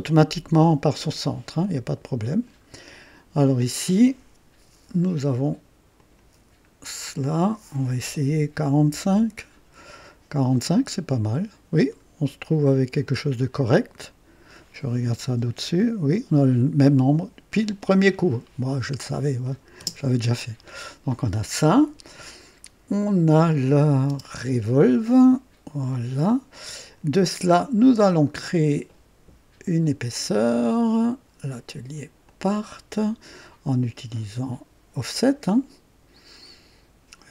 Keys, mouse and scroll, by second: 0.3 scroll down 1, 1.0-1.5 right drag, 1.6-2.6 drag, 5.9 click, 7.1 click, 8.4 KP_4, 8.7 KP_5, 9.0 Return, 9.1 Return, 10.7-14.7 drag, 15.2 KP_2, 16.8-17.7 drag, 18.0 scroll up 1, 19.4 click, 19.8 space, 20.4-20.7 scroll down 1, 23.5 click, 24.0 space, 25.1-27.0 drag, 27.4 scroll up 1, 28.0 right click, 32.4 click.